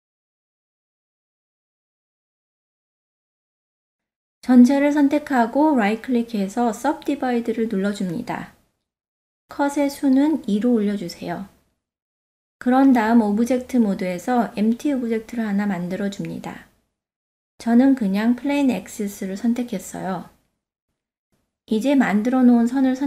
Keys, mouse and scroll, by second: 5.8 a, 6.2-8.0 drag, 6.2 right click, 9.1 click, 10.4 click, 12.5 Tab, 13.5 shift+a, 19.6 click, 22.4 click.